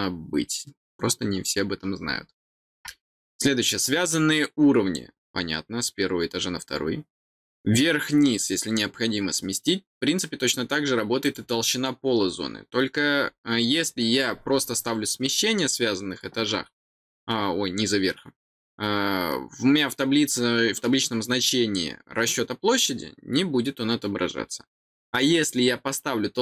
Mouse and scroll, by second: 11.2 click.